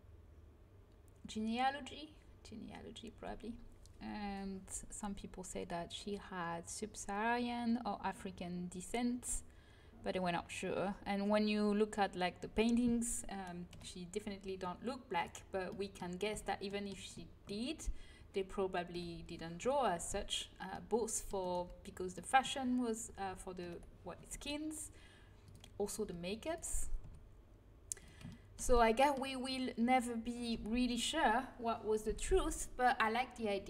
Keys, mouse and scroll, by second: 13.6 KP_1, 16.2 z, 18.8 KP_1, 19.6 z, 20.0 c, 21.5 z, 23.5 KP_1, 24.1 g, 25.9 g, 26.9 r.